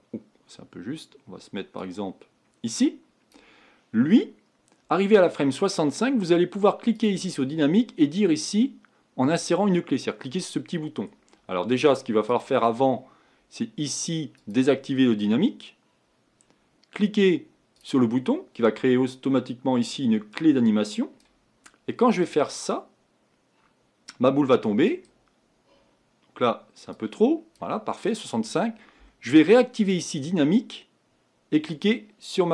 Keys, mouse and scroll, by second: 6.9-10.0 drag, 12.3-17.4 drag, 17.7-32.5 drag.